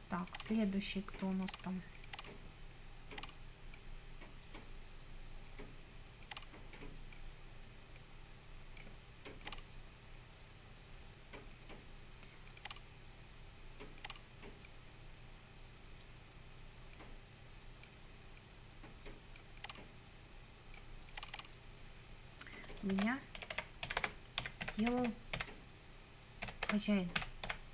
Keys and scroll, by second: 22.7-27.7 typing.